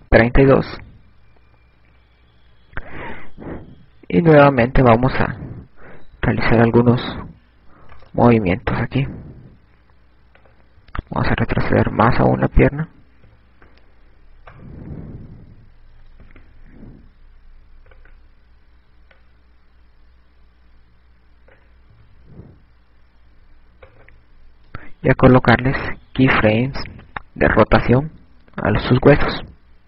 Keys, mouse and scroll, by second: 9.7 right click, 11.8 click, 16.3 right click, 18.0 i, 19.8 right click, 21.0 click, 25.8 right click, 26.6 i.